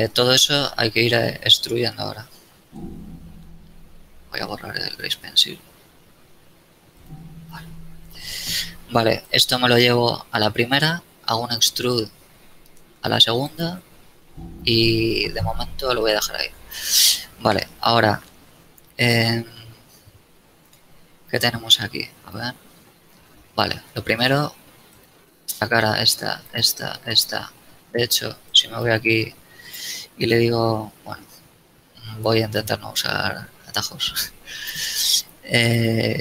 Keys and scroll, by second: 2.1 Escape, 3.6 n, 7.5 n, 11.1 e, 16.5 a, 21.5 z, 24.5 ctrl+Tab.